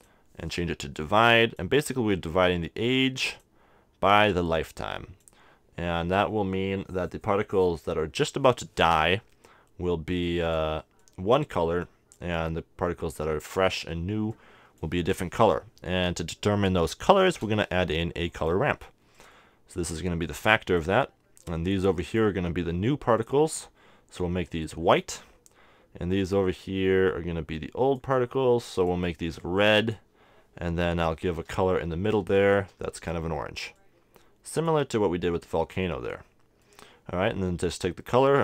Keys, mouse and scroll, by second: 0.1-2.2 drag, 2.7-5.8 drag, 5.9 click, 10.1-13.8 drag, 14.3-16.2 drag, 15.1-16.8 middle drag, 17.2 shift+a, 19.2-21.6 drag, 22.0-24.8 drag, 27.1-30.6 drag, 32.5-34.9 drag, 36.7-38.4 middle drag, 37.7-38.4 drag.